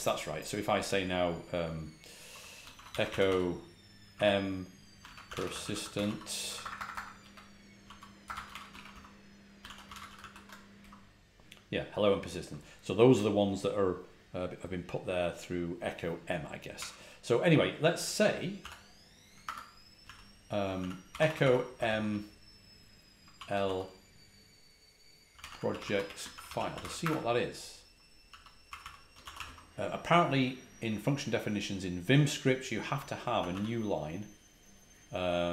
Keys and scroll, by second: 2.4-10.7 typing, 16.7 typing, 18.5-22.2 typing, 25.0-29.4 typing, 33.0-33.9 typing.